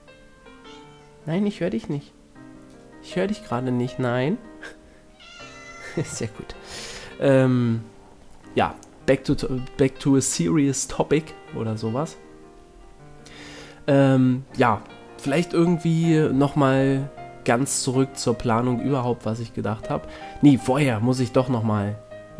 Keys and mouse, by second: 3.8-8.1 drag, 8.7 click, 10.5 ctrl+l, 11.3-12.4 middle drag, 11.7 s, 21.1-22.3 drag.